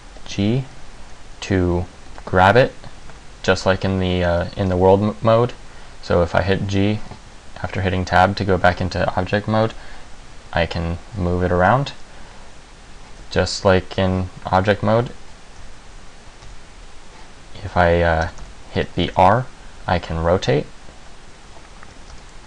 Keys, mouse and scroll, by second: 0.2 g, 2.2 g, 4.8 Tab, 9.8 g, 15.7 Tab, 16.6 Tab, 18.4 a, 18.6 a, 19.0 r, 22.2 r.